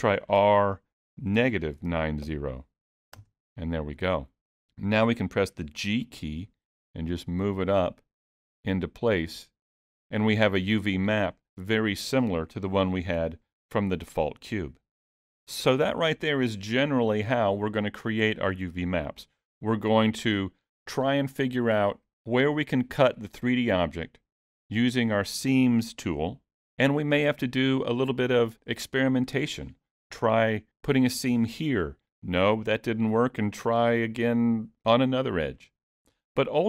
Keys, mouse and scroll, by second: 0.1 r, 6.1 g, 19.2 middle click.